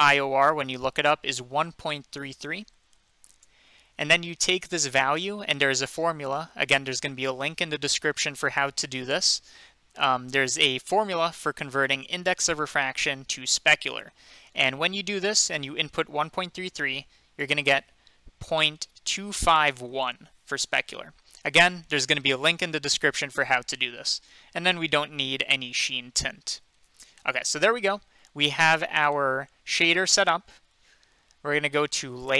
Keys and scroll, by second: 1.9-3.2 typing, 3.3 Return, 8.3 typing, 18.7-20.3 typing.